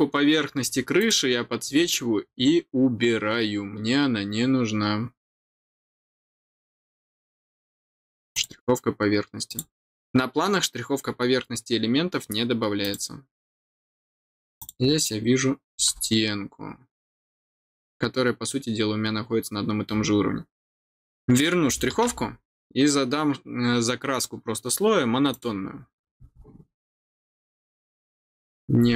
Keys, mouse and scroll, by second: 0.9 click, 4.1 scroll up 1, 4.9 scroll up 1, 5.6 scroll up 1, 5.7 scroll down 1, 6.4-6.8 scroll down 2, 8.3 click, 9.4 click, 12.8 click, 14.5 click, 25.3 click, 28.3 scroll down 1.